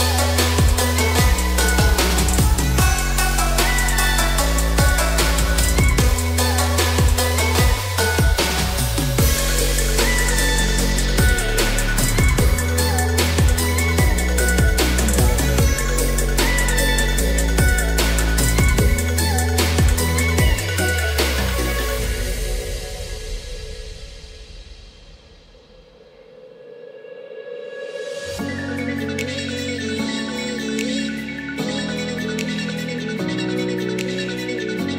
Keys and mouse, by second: 17.3 3, 18.0 middle click, 20.5 click, 21.2-22.7 middle drag, 25.5-26.6 drag, 27.5 g.